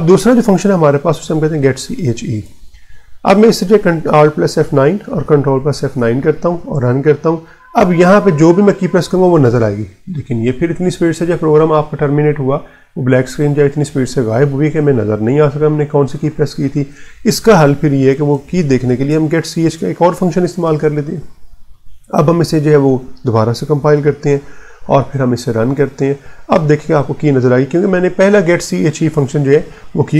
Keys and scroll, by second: 0.9 Left, 2.3 e, 4.3 alt+F9, 5.0 Return, 5.7 ctrl+F9, 9.2 r, 10.8 Right, 16.6 Return, 17.6-20.6 typing, 22.7 alt+F9, 23.7 Return, 24.8 ctrl+F9.